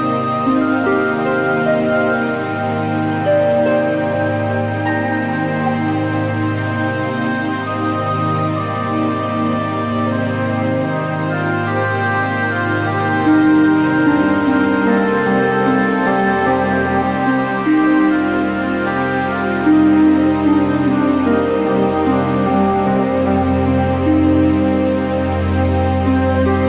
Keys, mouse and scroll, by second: 2.3 click, 2.5 a, 3.6-3.9 scroll, 4.7 g, 6.4 click, 7.2 click, 7.3 click, 8.4 a, 9.5-11.0 alt+middle drag, 11.0 alt+scroll, 11.6-12.3 scroll, 13.2 click, 14.4 click, 15.6 click, 15.9 scroll, 16.2 middle click, 16.5 middle click, 16.5 a, 16.7 middle click, 17.3 alt+middle click, 17.3-18.8 scroll, 18.4 q, 18.9 right click, 19.8 click, 20.9 click, 21.5 0, 21.5 Return, 23.2 scroll, 23.8-24.3 alt+scroll, 24.5 alt+middle click.